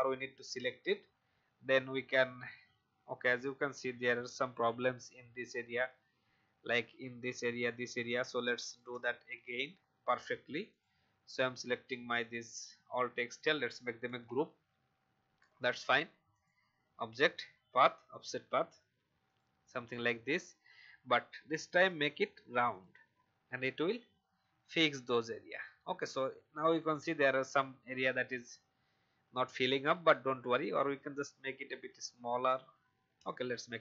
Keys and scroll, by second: 9.4 Delete, 14.0 ctrl+g.